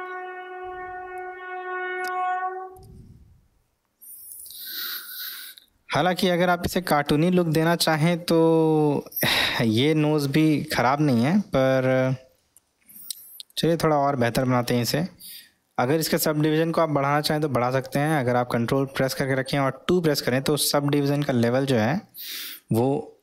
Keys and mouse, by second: 8.1-8.6 middle drag, 8.8-10.1 middle drag, 10.8-12.1 middle drag, 12.4-13.5 middle drag.